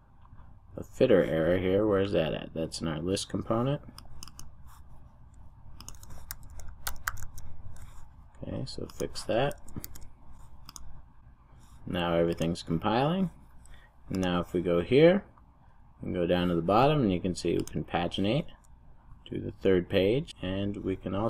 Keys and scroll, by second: 6.3 super+f, 10.0 super+s.